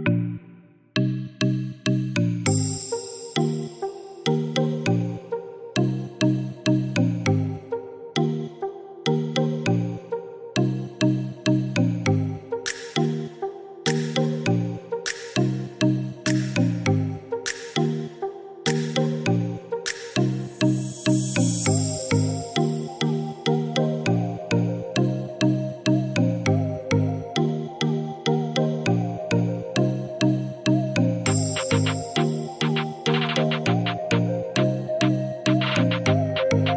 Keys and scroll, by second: 5.9-7.4 typing, 7.5 Return, 16.5 1, 16.8 Return, 24.5 3, 26.4 BackSpace, 26.9 Return, 31.5 3, 32.0 Return, 34.5-36.0 typing, 36.1 Return.